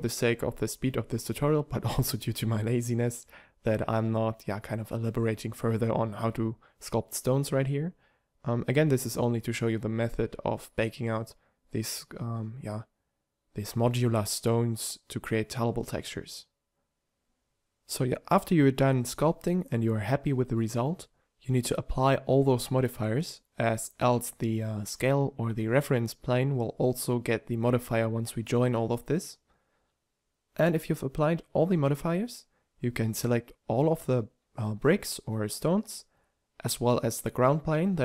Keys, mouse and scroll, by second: 3.0 click, 3.9 click, 7.1 click, 7.3-8.0 ctrl+z, 8.5 f, 11.4 drag, 14.5 click, 16.5 a, 16.5 z, 17.1 z, 28.6-28.9 middle drag, 31.9 click, 36.2-37.3 drag, 37.7-38.0 drag.